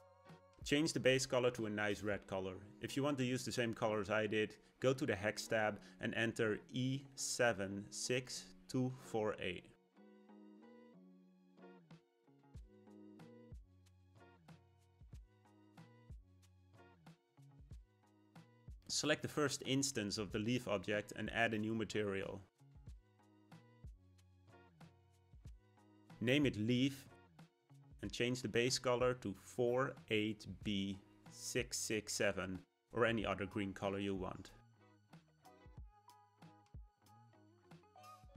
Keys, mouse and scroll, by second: 1.0 click, 19.6 click, 22.9-27.2 drag, 28.5 click.